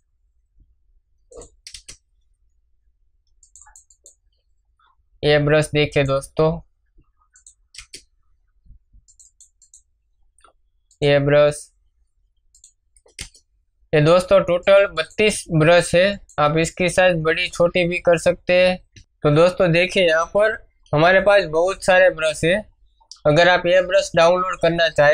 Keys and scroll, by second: 1.6 Return, 7.7 Return, 13.1 Return, 18.5 space.